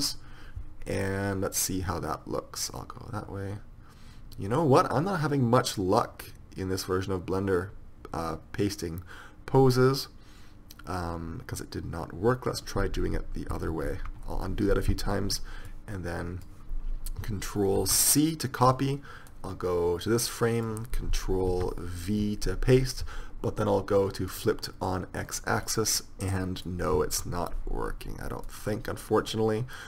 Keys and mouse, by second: 1.3 click, 13.2 ctrl+z, 14.1 ctrl+z, 16.0 drag, 19.5 ctrl+c, 21.7 ctrl+v, 24.5-26.5 drag, 26.5 middle click, 28.8-29.8 drag.